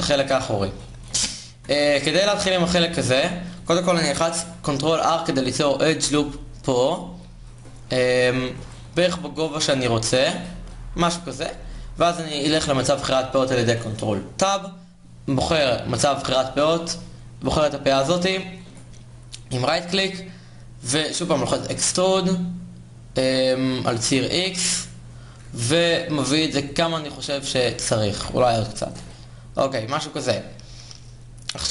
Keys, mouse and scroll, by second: 0.8 Tab, 2.7 alt+Tab, 4.5 ctrl+r, 7.7 click, 8.7 g, 11.1 ctrl+Tab, 11.1 click, 14.2-21.1 middle drag, 21.1 e, 26.4 middle click, 27.6 alt+g, 31.2 middle click.